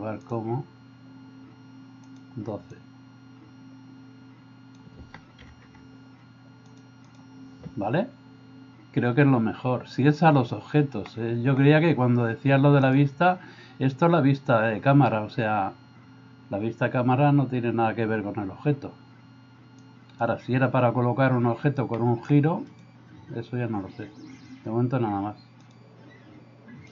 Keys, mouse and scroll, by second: 11.1-11.6 middle drag, 12.9-17.2 drag, 19.8 click, 22.0 middle drag.